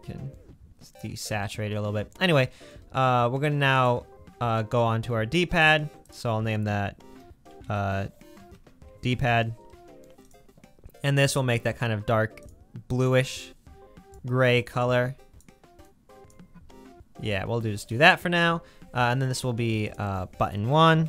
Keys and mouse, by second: 0.6 middle click, 3.8 click, 5.6 click, 10.4 click, 13.2-15.0 drag, 15.2-15.8 drag, 17.1-18.1 middle drag, 18.1-19.4 drag.